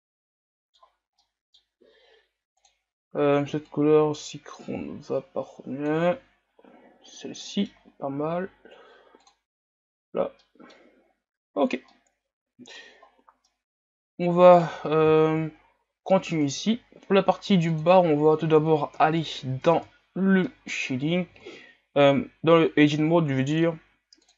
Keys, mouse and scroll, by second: 0.8-1.2 scroll up 1, 1.2-3.7 middle drag, 3.7 click, 7.2 scroll down 2, 7.5 middle click, 8.1 a, 9.5 click, 10.2 scroll down 1, 10.4-11.0 middle drag, 11.0 scroll up 3, 12.0-13.0 middle drag, 13.0-13.7 scroll up 1, 13.7-14.8 middle drag, 14.8-15.5 scroll down 3, 15.5 scroll up 6, 16.5-17.8 right drag, 17.8-19.0 drag, 19.0 KP_Divide, 19.7 Tab, 20.2-20.5 scroll down 1, 20.5 middle click, 20.8-22.0 scroll up 3.